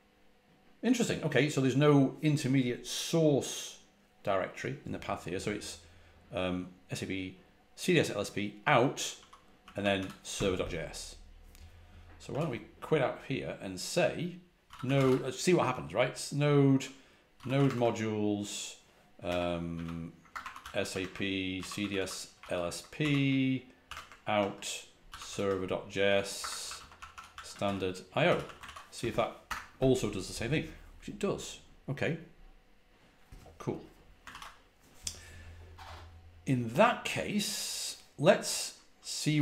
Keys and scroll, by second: 8.8-10.4 typing, 12.2 typing, 14.3-15.4 typing, 17.0-18.0 typing, 19.2-28.8 typing, 29.3 Return, 34.2 ctrl+c.